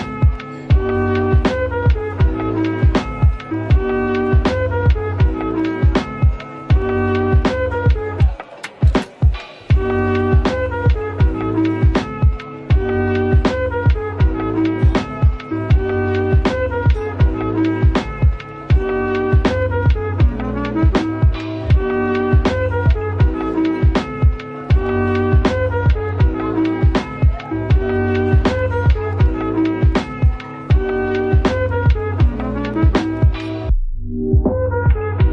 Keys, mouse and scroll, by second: 0.0-0.9 scroll down 1, 0.9-1.2 typing, 2.4 middle click, 5.3 typing, 15.8 typing, 18.0 typing, 20.8-21.2 typing, 23.1-24.0 typing, 26.0 typing, 31.6-32.1 typing.